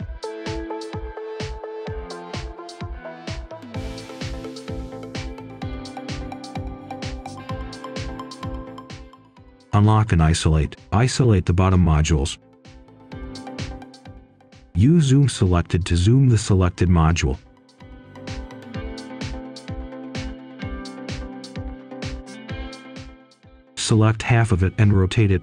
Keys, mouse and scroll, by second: 0.1 shift+click, 0.3 shift+click, 0.5 right click, 0.7 scroll down 1, 1.1 shift+click, 3.1 shift+click, 3.8 shift+Delete, 4.4 right click, 4.9-5.2 scroll up 1, 5.2 right click, 5.8-6.8 typing, 7.7 click, 8.1 shift+click, 8.4 shift+click, 8.8 shift+click, 9.4 typing, 9.6 Return, 10.2 Escape, 10.5 click, 11.3 Return, 12.0 Escape, 12.3 click, 14.4 z, 15.0 Return, 15.6 click, 16.1 right click, 16.7-17.2 scroll up 1, 17.2 right click, 18.3-18.8 scroll down 1, 18.8 right click, 20.2 ctrl+shift+click, 21.5 right click, 22.0-22.3 scroll up 1, 22.5 right click, 23.6 ctrl+shift+click, 25.0 scroll down 1, 25.3-25.4 scroll up 1.